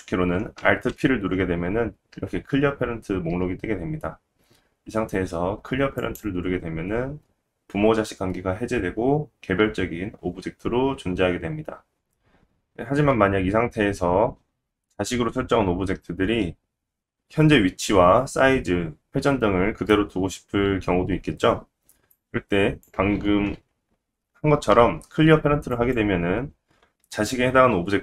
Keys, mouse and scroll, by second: 0.9 alt+p, 11.7 middle click, 11.9 click, 11.9 right click, 12.3-22.1 middle drag, 22.1-28.0 drag, 24.7 alt+p.